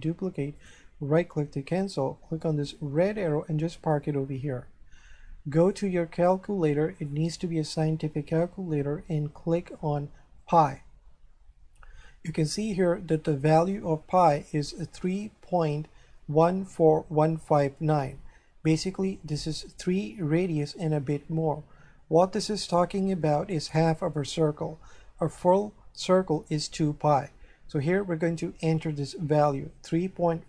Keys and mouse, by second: 0.6 right click, 2.5 click, 5.6 click, 7.0 click, 10.4 click.